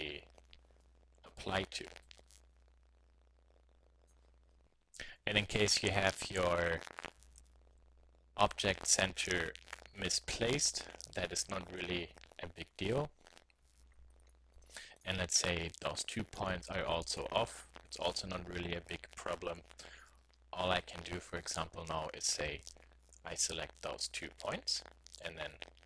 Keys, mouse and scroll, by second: 2.0-3.7 drag, 3.7-5.2 middle drag, 5.2 KP_3, 12.9 KP_1, 17.6 middle click, 22.2-23.8 drag, 24.0 middle click, 24.1 click.